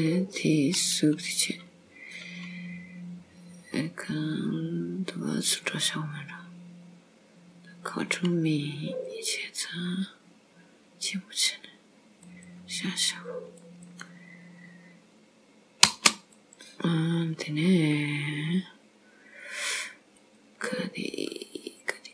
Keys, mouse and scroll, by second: 16.3 click, 19.1 scroll up 1, 20.2 click.